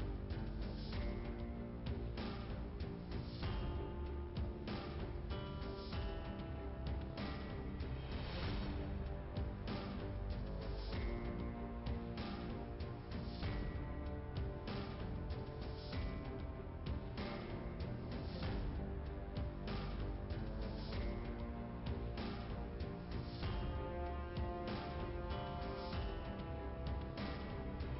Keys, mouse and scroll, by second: 1.5 click, 2.5 click, 3.8 click, 4.2 scroll down 2, 5.6 scroll up 1, 7.1-7.5 scroll up 2, 8.4 click, 8.4 scroll up 1, 9.2 click, 13.5 click, 14.1 click, 14.1 double click, 15.6 click, 17.9 click, 19.0 click, 20.4 middle click, 21.5 click, 25.6 click, 26.5 click, 26.7 click.